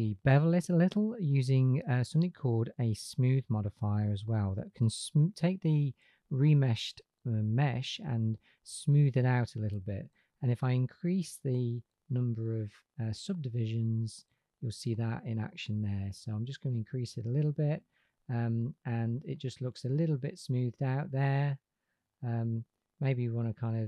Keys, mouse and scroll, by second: 2.9-6.8 drag, 11.2-16.8 drag, 18.3 middle click.